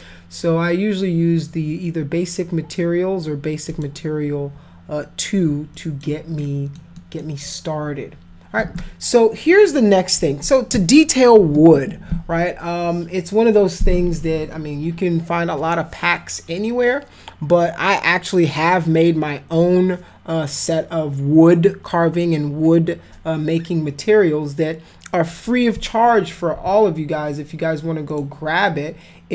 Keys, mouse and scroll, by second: 3.6 click, 5.7 alt+click, 6.4 alt+middle click, 6.9 alt+middle click, 28.1 click.